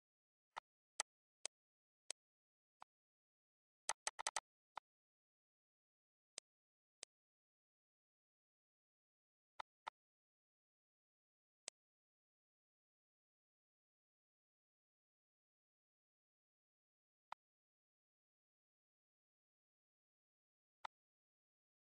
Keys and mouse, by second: 0.8 click, 1.0 z, 1.2 click, 2.3 ctrl+s, 3.6 click, 5.4 click, 11.2 click, 14.9 click, 17.6 click, 18.5 click, 19.4 click.